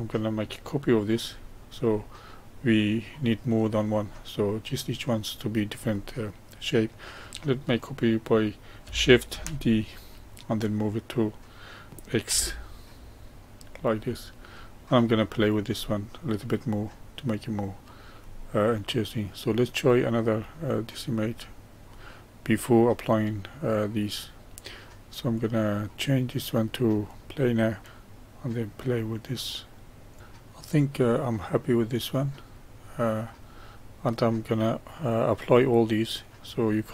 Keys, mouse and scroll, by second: 1.3-1.8 scroll down 1, 1.8-3.2 middle drag, 3.2-4.0 scroll up 1, 4.0-7.0 middle drag, 9.3 shift+d, 14.1-15.2 middle drag, 15.2 click, 15.8-18.8 middle drag, 19.2-22.2 drag, 24.1-30.2 drag, 36.3 click.